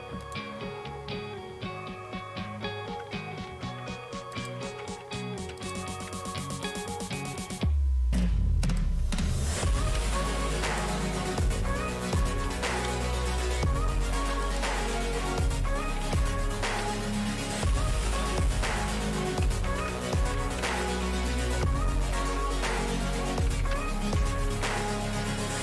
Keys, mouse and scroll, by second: 0.2 click, 0.6-1.2 scroll down 2, 2.4-3.1 ctrl+scroll down 1, 3.2-6.2 typing, 8.7-11.1 typing, 10.7 click, 11.2 Return, 12.1 click, 12.2-25.6 typing, 24.9-25.6 scroll up 1.